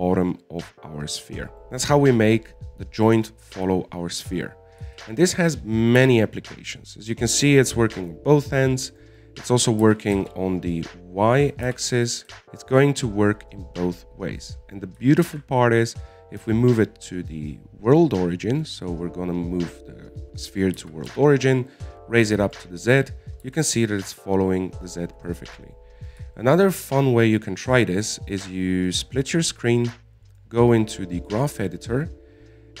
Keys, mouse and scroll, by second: 0.6 middle click, 1.0-1.6 scroll down 5, 1.6-4.3 middle drag, 4.6-6.2 shift+middle drag, 6.2 KP_1, 7.4 g, 10.6 middle click, 10.9-11.2 scroll down 1, 11.2 g, 12.4 g, 16.6 shift+s, 22.1 g, 24.8 g, 26.9 scroll down 3, 27.2 middle click, 27.8-30.2 scroll up 4, 30.2-32.8 drag.